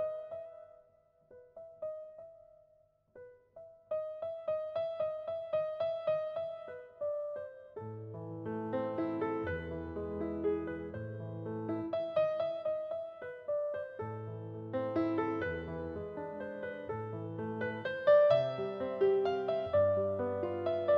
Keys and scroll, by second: 14.6 space, 20.3 space.